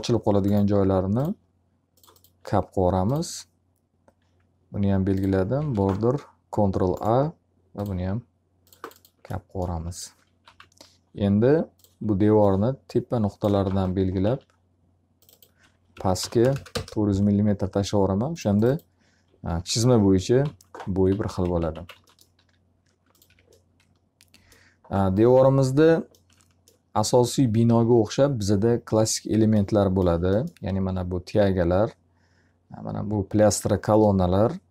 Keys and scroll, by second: 5.0 ctrl+a, 9.9 f, 10.5 z, 13.6 w, 14.2 s, 15.6-16.9 typing, 19.6-22.3 typing, 21.0 alt+a, 21.9 alt+a, 23.2 F3.